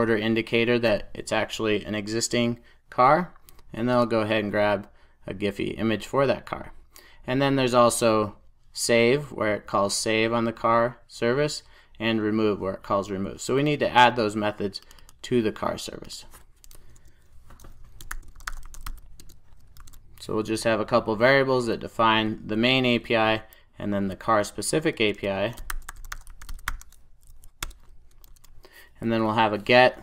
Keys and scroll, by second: 19.2 Return, 21.1 super+s, 27.5 Return.